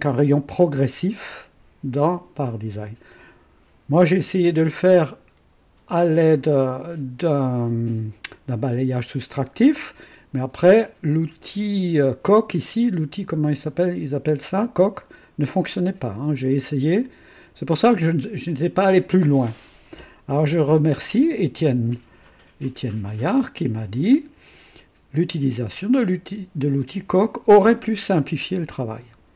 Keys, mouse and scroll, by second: 10.6-11.6 drag, 16.1-17.4 drag, 18.0 click, 22.8 click.